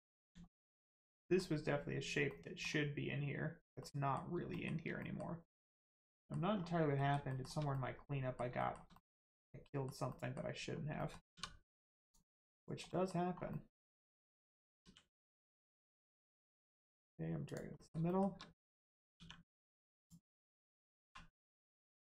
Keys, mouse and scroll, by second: 0.4 shift+middle click, 1.2 middle click, 1.2 middle click, 3.8 middle click, 4.5 shift+middle click, 5.0 middle click, 5.0 middle click, 5.6 click, 6.1 middle click, 6.5 scroll down 1, 7.0 middle click, 7.2 shift+middle click, 7.7 middle click, 7.8 middle click, 8.6 shift+middle click, 8.9 middle click, 9.0 middle click, 11.3 2, 12.0 click, 12.8 middle click, 13.2 scroll up 1, 13.5 middle click, 14.8 e, 15.3 middle click, 17.4 click, 17.8 middle click, 18.0 shift+middle click, 19.2 middle click, 20.0 click, 20.6 middle click, 21.0 1, 21.5 click.